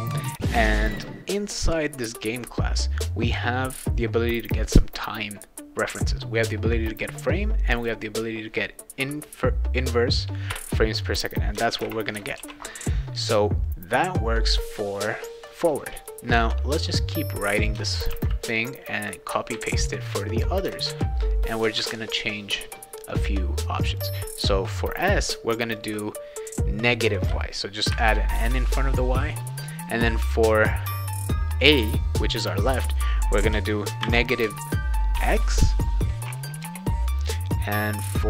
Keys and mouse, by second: 0.0-0.3 typing, 7.7 click, 10.5 Return, 11.4-12.3 typing, 12.4 ctrl+s, 13.9 click, 14.7 click, 14.9 click, 16.0-16.4 drag, 17.1 click, 18.1 ctrl+c, 19.0 click, 19.5 ctrl+v, 20.6 ctrl+click, 20.9 ctrl+v, 21.5 click, 21.7 ctrl+v, 23.1-24.0 drag, 25.7 click, 27.9 shift+n, 29.8-31.3 drag, 34.0 shift+n, 35.2 shift+x, 36.6 BackSpace.